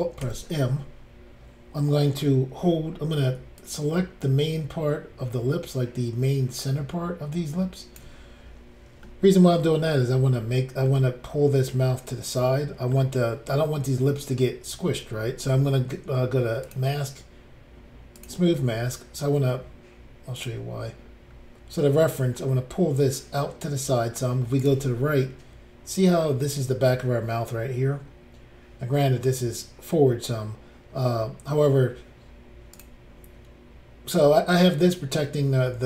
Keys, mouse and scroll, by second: 0.2 alt+m, 2.9-3.3 scroll down 1, 3.6 ctrl+click, 9.1 middle click, 9.6 scroll up 1, 9.7 scroll down 3, 10.4-10.8 scroll down 1, 13.0 middle click, 16.7 click, 16.8 click, 18.2 click, 18.8 middle click, 20.4 click, 20.5 click, 21.3-21.7 scroll up 3, 24.6 click, 24.7 click, 32.7 click, 32.8 click.